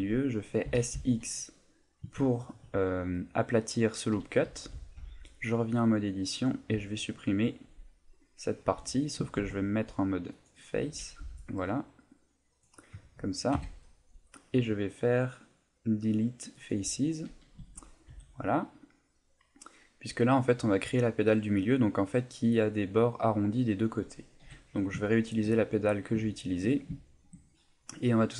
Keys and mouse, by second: 0.6 s, 4.4 a, 4.7 z, 9.3 ctrl+Tab, 11.2 b, 13.5 Delete, 17.6 Tab, 18.1 z, 18.5 middle click, 19.5 middle click, 23.5 middle click, 24.4 KP_7, 25.1 shift+middle click, 26.3 shift+middle click.